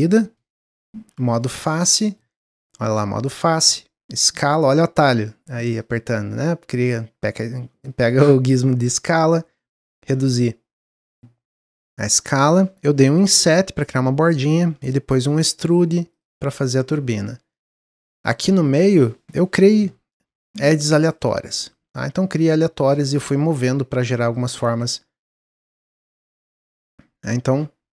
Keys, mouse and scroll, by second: 0.1 click, 1.1 3, 1.4 click, 1.8-3.6 middle drag, 3.6 s, 5.6-7.9 drag, 10.9-13.4 middle drag, 13.4 i, 15.2 e, 16.4 middle click, 17.2 Tab, 17.5 Tab, 17.7-20.2 middle drag, 20.2 ctrl+r, 21.8 ctrl+r, 23.3 ctrl+r, 24.5 ctrl+r, 25.4 ctrl+r, 27.0 w, 27.4 s.